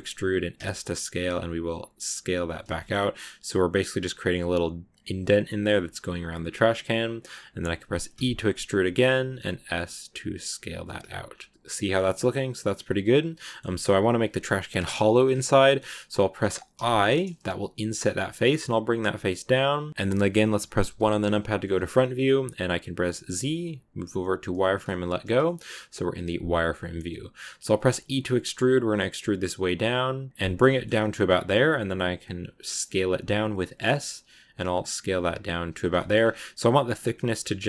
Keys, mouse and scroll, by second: 2.6 shift+middle click, 2.8-5.8 scroll up 3, 11.1 scroll down 1, 11.1 scroll up 2, 11.2 scroll down 1, 11.2 scroll up 1, 11.5-12.6 middle drag, 12.6-13.3 scroll up 2, 13.3-16.6 middle drag, 16.6 i, 19.9 shift+middle click, 20.7 KP_1, 21.5-23.2 shift+middle drag, 23.2 z, 25.0 click, 25.3 shift+middle click, 26.2 s, 30.6 shift+middle click, 30.7 scroll up 1, 31.4 s, 35.8 shift+middle click, 36.0 shift+scroll up 3.